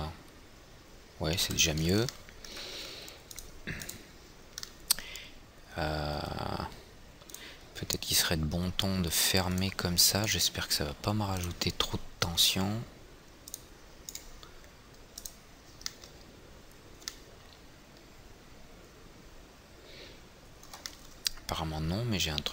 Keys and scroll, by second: 0.0 F4.